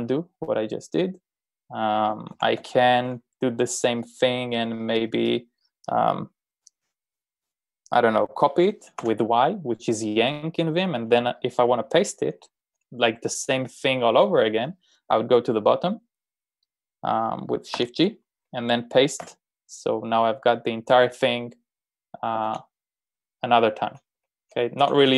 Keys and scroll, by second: 2.1-3.1 typing, 9.0 y, 18.0 shift+g, 19.3 p, 22.5 shift+g, 24.2 ctrl+k, 24.4 ctrl+k, 25.0-25.1 typing.